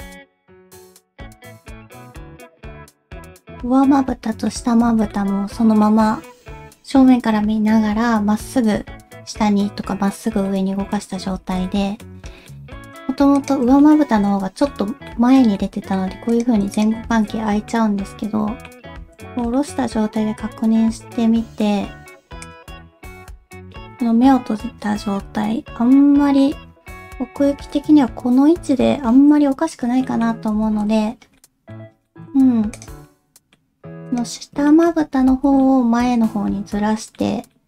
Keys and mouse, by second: 0.2-2.7 middle drag, 2.8 alt+z, 2.9 middle click, 3.8 middle click, 4.9 alt+z, 5.1 middle click, 7.8 KP_1, 10.5 middle click, 11.4 alt+z, 11.6 middle click, 12.5 middle click, 13.4 shift+click, 13.8 middle click, 15.1 middle click, 15.6 middle click, 16.3 click, 16.8 shift+click, 17.1 alt+z, 17.7 middle click, 19.2 shift+middle click, 19.5-21.6 middle drag, 22.4 click, 22.8-26.4 middle drag, 27.4 g, 30.0 middle click, 30.6 alt+z, 31.4 middle click, 32.1 shift+middle click, 32.7 click, 33.0 middle click, 34.1 click, 34.7 shift+middle click, 35.3 alt+z, 35.6-37.2 middle drag, 37.5 middle click.